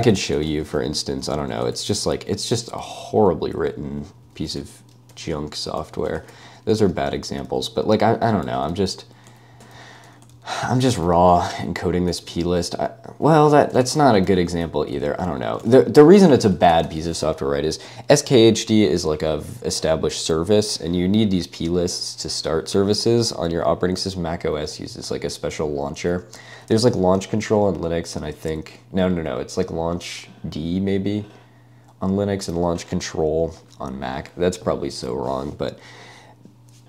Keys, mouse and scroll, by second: 0.0-1.0 typing, 1.8 ctrl+n, 1.9 ctrl+n, 2.2 ctrl+n, 2.6 Return, 2.9 ctrl+d, 3.1 ctrl+d, 3.2 ctrl+d, 3.3 ctrl+d, 4.5-6.6 typing, 7.0 ctrl+d, 7.2 ctrl+d, 7.3 ctrl+d, 7.6 ctrl+u, 8.0 ctrl+u, 8.5-10.6 typing, 10.8 ctrl+d, 11.7 Escape, 12.1 ctrl+u, 12.2 ctrl+u, 12.5 ctrl+u, 13.5-17.4 typing.